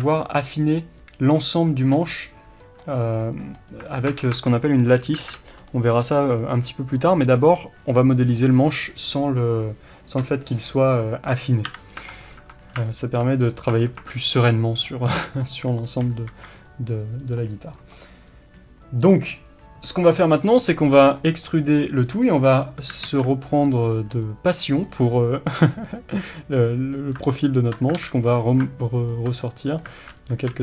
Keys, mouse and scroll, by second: 2.0 scroll down 1, 3.0 scroll up 1, 3.2 middle click, 3.9 Tab, 5.2 alt+a, 5.7 middle click, 11.7 KP_7, 12.0 Tab, 12.3 scroll up 1, 12.4 Tab, 12.9 shift+middle click, 13.5 scroll up 1, 13.8 Tab, 14.6-20.7 middle drag, 15.2-16.2 scroll up 1, 16.2 KP_3, 20.7 scroll up 1, 21.1 scroll down 1, 21.2-26.8 middle drag, 23.1 alt+z, 26.8 click, 28.0 alt+a, 28.2 click, 29.5-30.6 middle drag, 30.0 alt+a, 30.4 KP_3.